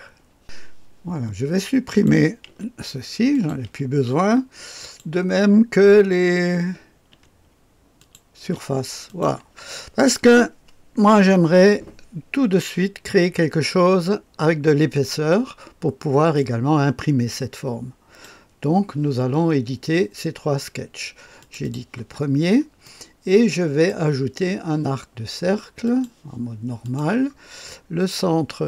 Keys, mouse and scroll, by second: 1.8 click, 2.4 Delete, 3.2 click, 3.6 Delete, 3.6-5.4 drag, 7.0 Delete, 7.9 click, 8.4 Delete, 9.0 click, 13.7-18.2 drag, 21.3 click, 21.5 click, 22.8-24.1 middle drag, 22.8-23.8 scroll up 1, 23.8 scroll up 1, 25.8 click, 26.8 click.